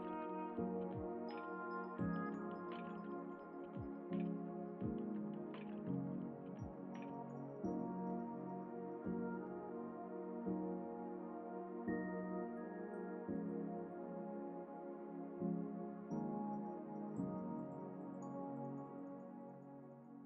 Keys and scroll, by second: 5.2 Up, 6.2 Down, 7.2 Up.